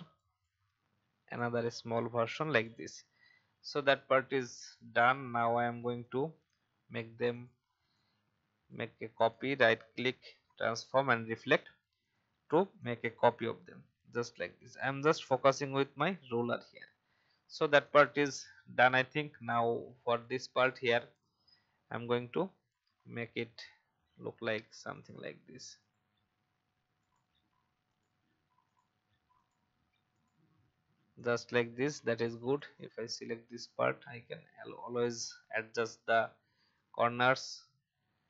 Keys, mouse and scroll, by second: 3.2-4.6 alt+scroll down 1, 4.6 click, 7.3 shift+click, 8.2 alt+click, 9.1 right click, 10.9-15.3 drag, 15.7 Up, 16.0 Up, 16.2 Up, 16.5 Up, 16.8 Up, 17.8 click, 18.9-20.1 scroll up 1, 20.1 click, 30.5 v, 31.1 click, 31.7 a, 32.1 click, 36.3 v, 36.6 click, 37.5-38.2 alt+drag.